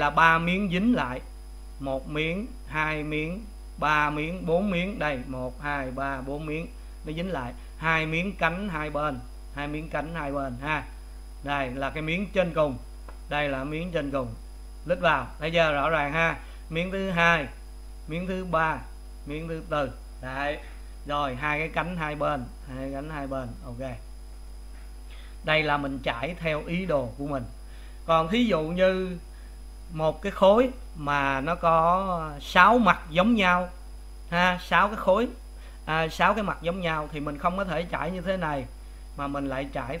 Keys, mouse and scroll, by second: 0.6-13.0 middle drag, 14.6 click, 16.0-17.2 middle drag, 17.2 click, 17.5-18.5 middle drag, 18.5 click, 19.0 middle click, 19.8 click, 20.4-21.9 middle drag, 21.9 click, 22.2 middle click, 23.1 click, 23.6-24.8 middle drag, 24.8 click, 27.3-40.0 middle drag.